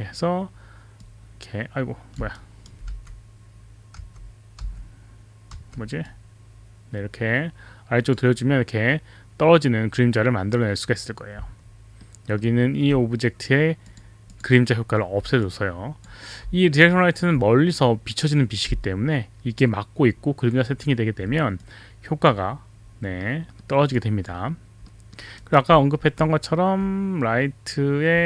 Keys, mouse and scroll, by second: 1.0 click, 2.3 alt+right click, 2.8 w, 3.9 e, 4.6 w, 5.6 e, 6.0 click, 12.0 alt+middle click, 13.9 click, 14.2 click, 15.5-16.3 alt+drag, 21.6-22.3 alt+drag, 23.3 alt+middle click, 23.9 alt+click, 25.0 alt+middle click, 25.4 alt+right click.